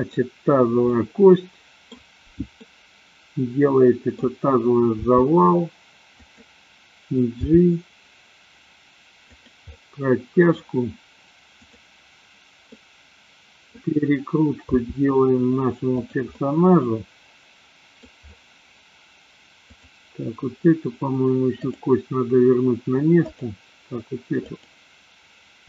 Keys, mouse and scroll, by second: 0.9-2.0 middle drag, 2.6-4.3 middle drag, 5.0 r, 6.4 click, 7.5 g, 9.8 middle click, 11.6 click, 12.8-13.8 middle drag, 14.8 r, 16.1 click, 16.3-18.0 middle drag, 19.6 click, 21.5-22.3 drag, 23.4 click, 24.3 click.